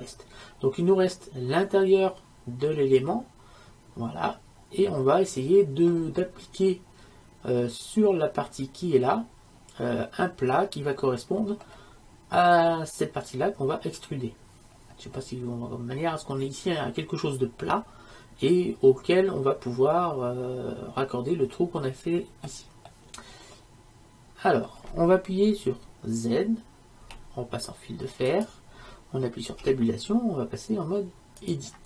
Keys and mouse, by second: 1.9-4.2 middle drag, 10.6-27.1 middle drag, 27.1 z, 29.7 Tab.